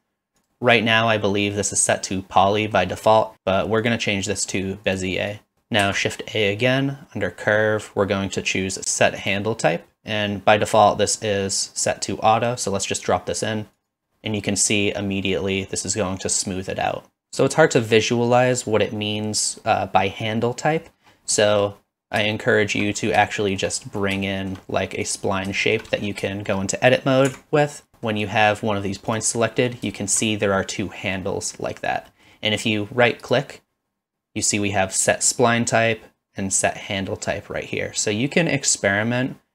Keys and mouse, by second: 2.7 middle click, 3.9-5.0 drag, 5.3 click, 5.8 shift+a, 21.3 middle click, 22.3-22.8 shift+middle drag, 23.3-23.6 shift+middle drag, 24.3 shift+middle drag, 25.0 click, 25.6 shift+middle drag, 26.3 shift+middle click, 27.3 Tab, 27.9 Tab, 27.9 middle click, 29.4 middle click, 29.9 shift+middle click, 32.1 middle click.